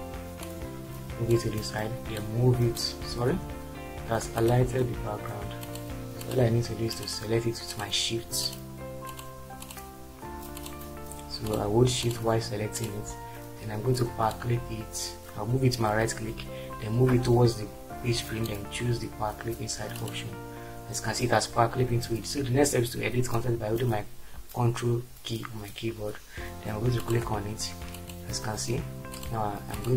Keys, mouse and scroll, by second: 3.8 ctrl+z, 4.8 ctrl+z.